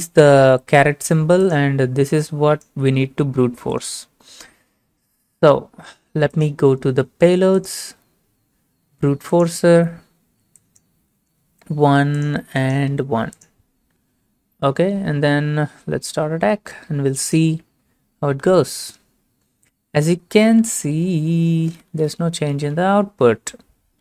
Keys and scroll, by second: 11.6 typing, 12.9 typing.